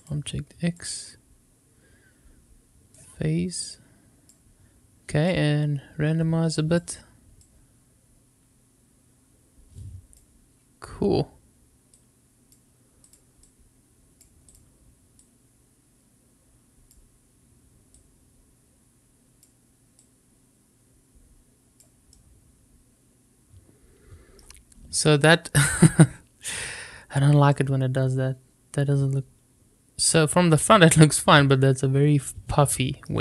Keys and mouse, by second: 0.0 click, 2.9-4.3 drag, 5.2-6.7 drag, 7.6-10.2 drag, 11.9-13.1 drag, 13.5-14.5 drag, 15.3-16.9 drag, 17.9-19.4 drag, 20.0-21.8 drag, 22.2-24.4 middle drag, 27.5-33.0 middle drag.